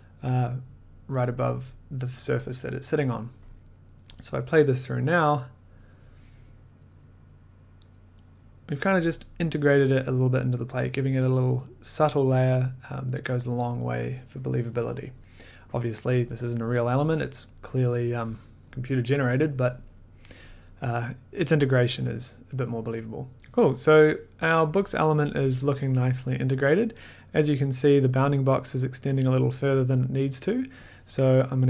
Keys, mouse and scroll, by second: 4.1 click, 18.6-25.8 drag, 30.8-31.6 drag.